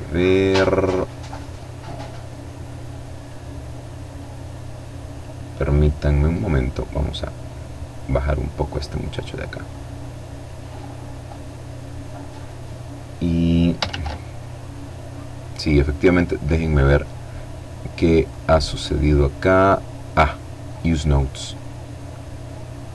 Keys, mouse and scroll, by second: 5.3-9.6 drag, 12.6 shift+a, 15.7-17.4 middle drag, 17.4 click, 19.4 click.